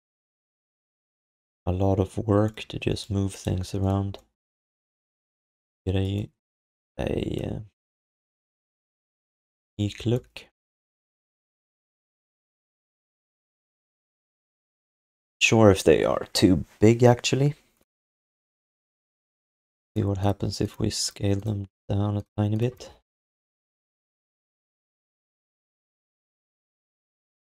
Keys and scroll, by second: 3.6 q, 9.6 ctrl+s, 22.8 r.